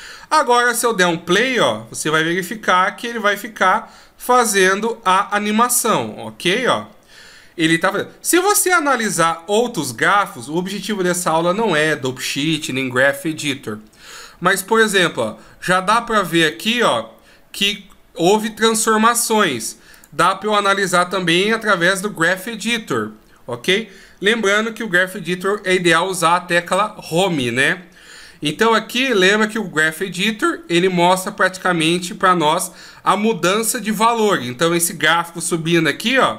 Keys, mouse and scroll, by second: 0.8 click, 9.5 click.